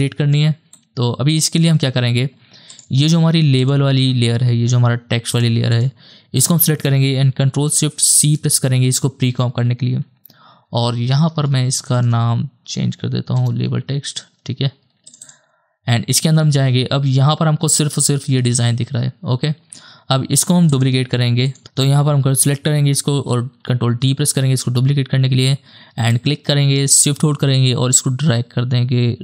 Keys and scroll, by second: 8.1 ctrl+shift+c, 10.5 Right, 11.0 BackSpace, 11.2 BackSpace, 11.4 BackSpace, 11.9 BackSpace, 13.4 Return, 18.4 space, 21.6 space, 23.4 ctrl+d.